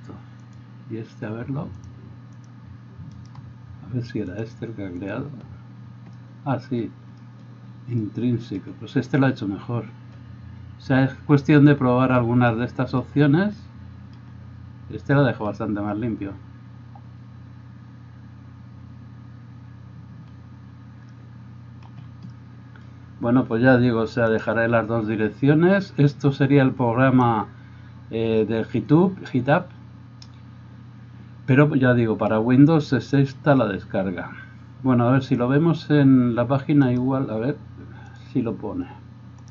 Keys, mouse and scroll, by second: 0.6-1.8 middle drag, 1.8 click, 2.0 middle click, 2.4 click, 2.5 middle click, 3.1-4.2 right drag, 4.2 middle click, 4.4-39.5 drag.